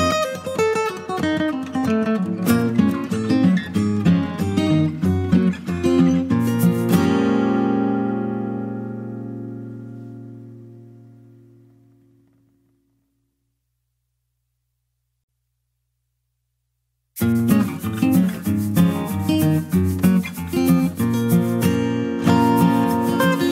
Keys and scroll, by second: 0.0 ctrl+space, 0.5 ctrl+space, 0.5 ctrl+space, 12.8 scroll.